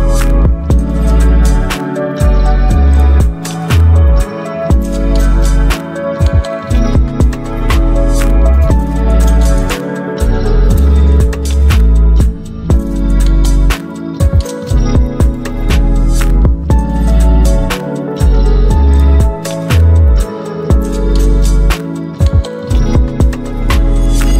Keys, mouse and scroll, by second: 10.8-15.6 drag, 16.0-21.1 alt+drag, 21.1-22.6 alt+drag, 22.6 Return, 23.9 alt+scroll up 3.